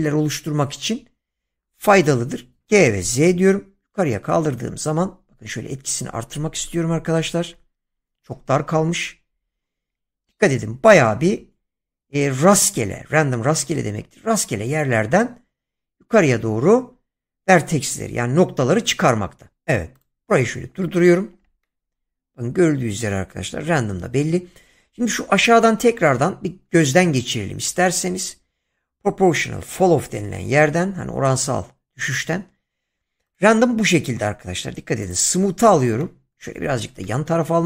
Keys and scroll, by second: 2.6 g, 3.2 z.